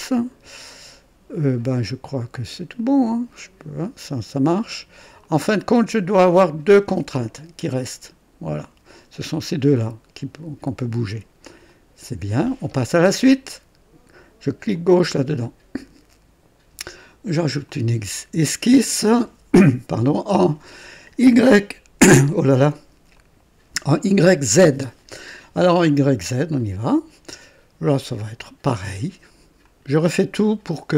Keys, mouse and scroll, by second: 1.6 right click, 2.8-4.1 drag, 5.2-6.7 drag, 11.6 click, 14.7 click, 17.6 click, 23.1 click, 26.5 click, 27.8 right click, 29.6 click.